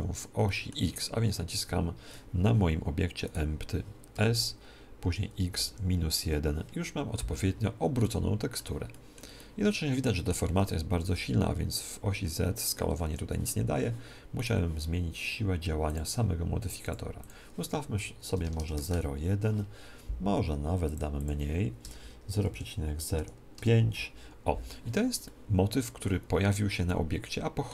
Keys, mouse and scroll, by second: 3.2-4.9 right drag, 4.1 s, 7.9-11.1 middle drag, 10.9 s, 11.1 middle click, 14.3-16.2 right drag, 15.8-18.7 drag, 20.8-22.7 drag, 25.2-27.7 middle drag.